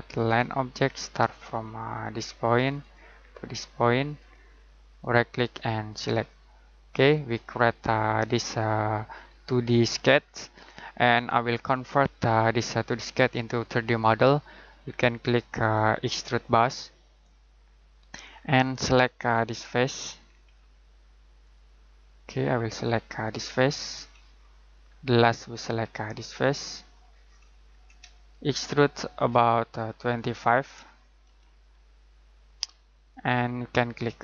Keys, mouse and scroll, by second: 5.0 right click, 5.9 click, 7.6 ctrl+middle click, 15.6 click, 18.3-21.4 scroll down 1, 21.4 click, 23.7 scroll down 1, 23.9-24.7 scroll up 1, 24.7-26.6 scroll down 1, 26.6 click, 27.0 scroll down 1, 27.2-28.4 scroll up 1, 28.6 ctrl+middle click, 30.1 click, 31.0-32.2 typing, 33.1 click.